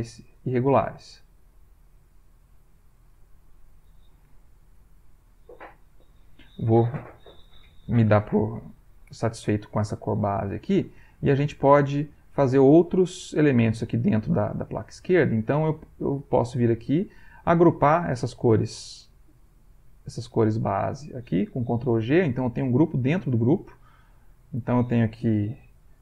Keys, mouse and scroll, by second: 0.6 click, 1.1 click, 1.7 click, 2.3 click, 2.9 click, 3.5 click, 4.3-6.1 middle drag, 16.0 click, 17.0 click, 17.6 shift+click, 19.9 click, 20.8 shift+click, 21.9 ctrl+g, 24.1 click.